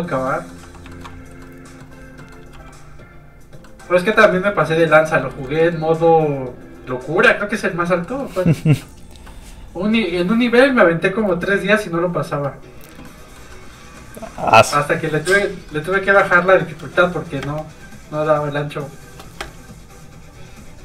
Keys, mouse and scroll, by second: 0.6 f, 0.7 click, 0.9 shift+middle click, 1.1 shift+f, 2.5 middle click, 2.5 f, 2.6 click, 3.6 middle click, 4.1 f, 4.2 click, 4.9 middle click, 5.3 shift+middle click, 5.7 middle click, 5.7 scroll down 1, 6.7 f, 6.9 click, 7.9 shift+scroll down 1, 8.0 shift+middle click, 8.3 middle click, 8.4 middle click, 14.3 shift+middle click, 15.3 middle click, 15.4 middle click, 15.9 shift+middle click, 16.1 middle click, 16.2 middle click, 17.4 shift+space, 18.9 shift+click.